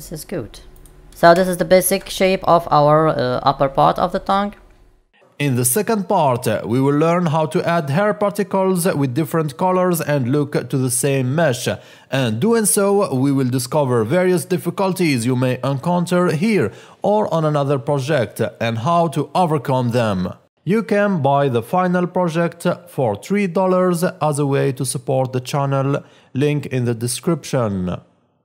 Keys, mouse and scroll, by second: 0.7 click, 1.4 shift+middle click, 2.1 middle click, 6.8 scroll down 10, 6.9 middle click, 7.9 click, 8.0 scroll down 3, 8.1 scroll up 4, 8.3 scroll down 1, 8.8 click, 8.9 middle click, 9.1 click, 9.2 click, 9.2 middle click, 9.4 click, 9.4 scroll up 10, 10.0 click, 12.2 click, 12.7 middle click, 13.0 scroll up 2, 13.1 ctrl+b, 13.4 click, 15.3 click, 15.5 click, 15.9 ctrl+alt+b, 16.0-16.4 scroll down 3, 16.3 shift+middle click, 16.9 click, 17.0 middle click, 17.4 click, 17.7-18.1 scroll down 29, 17.9-19.1 scroll up 20, 18.4 shift+middle click, 18.5 middle click, 18.9 click, 19.3 click, 19.5 middle click, 19.7 scroll up 13, 19.8 scroll down 1, 19.9 click, 20.0 KP_0, 20.1 middle click, 20.3 scroll down 1, 20.4 middle click.